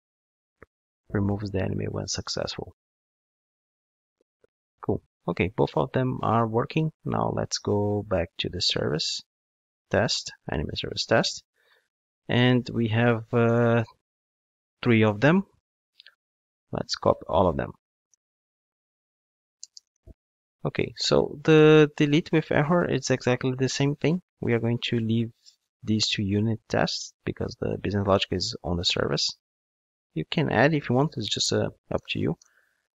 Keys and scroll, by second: 0.4 ctrl+shift+d, 17.7 super+c, 18.1 ctrl+Tab, 19.9 super+v.